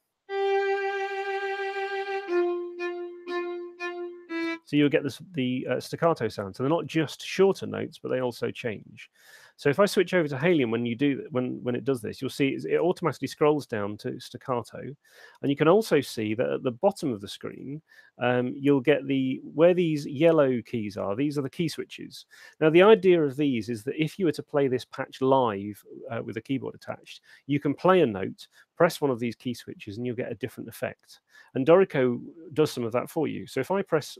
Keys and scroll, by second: 4.5 space.